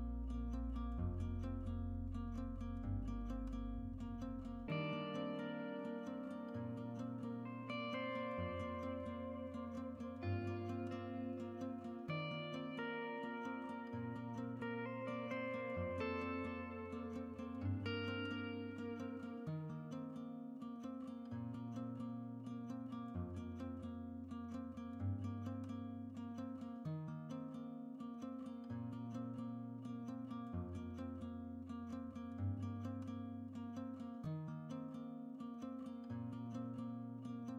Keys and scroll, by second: 13.7 Tab, 14.0 Tab, 23.7 Tab, 31.6 Tab.